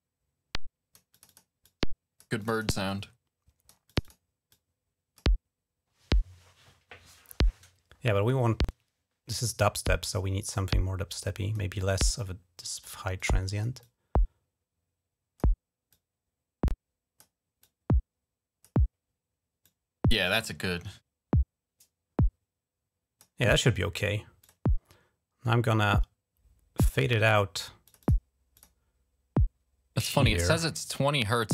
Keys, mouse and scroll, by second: 0.9 click, 1.4 click, 2.2 click, 2.3 click, 2.6 click, 3.6 click, 3.8 click, 4.3 click, 10.2-11.3 drag, 12.0 click, 12.9 click, 13.6-15.2 drag, 15.7-17.0 drag, 17.4-18.4 drag, 19.4-23.0 drag, 24.2 click, 24.5 click, 26.6 click, 27.6 click, 27.8 click, 28.3 click, 29.7-31.5 drag.